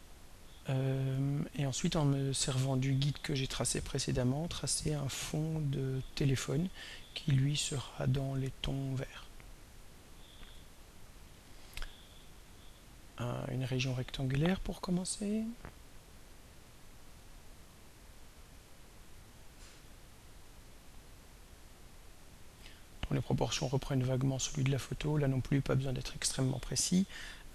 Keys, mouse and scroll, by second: 1.8 click, 4.5 click, 9.9 click, 11.5 click, 17.3-25.6 drag, 27.3 click.